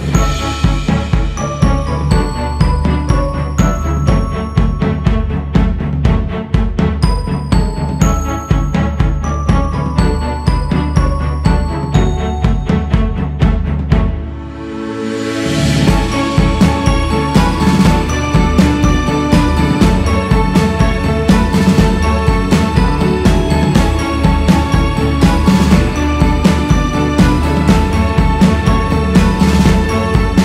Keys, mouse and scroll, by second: 0.4-1.7 drag, 1.7 scroll up 3, 3.0-5.8 drag, 5.8 f, 6.8-10.0 drag, 10.0 shift+c, 10.5 f, 11.9-16.3 drag, 16.3-17.4 scroll down 9, 17.4-19.0 scroll up 7, 19.0 click, 19.9-20.3 scroll up 3, 20.3 q, 21.8-23.2 drag, 23.2 f, 23.9-25.8 drag, 25.8 c, 26.1 f, 27.6-29.1 drag, 29.1-29.8 scroll down 2, 29.8-30.2 scroll down 4, 30.2 ctrl+z.